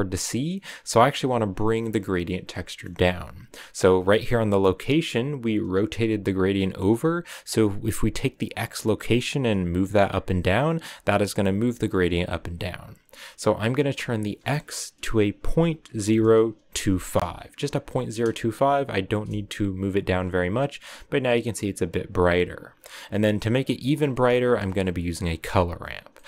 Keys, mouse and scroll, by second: 0.5-11.9 drag, 17.0-19.1 drag, 19.1 KP_0, 20.1-20.4 scroll up 2, 23.0-25.2 drag.